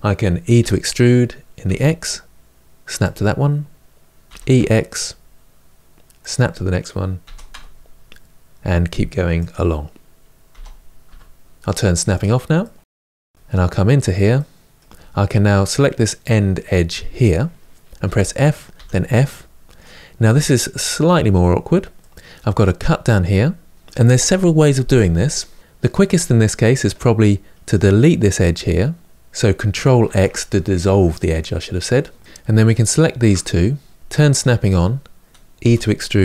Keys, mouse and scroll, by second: 0.3 e, 4.0 e, 7.0 e, 10.3 e, 11.9 click, 12.3-13.4 middle drag, 13.4-14.1 scroll up 2, 14.1-15.4 middle drag, 15.4 click, 17.7 f, 18.5 f, 19.0 middle click, 19.8-20.5 scroll up 1, 20.5 middle click, 21.1-21.7 scroll up 1, 21.7-27.4 middle drag, 27.4 click, 29.9 ctrl+x, 31.9 middle click, 32.2 click, 34.4 click, 35.4 e.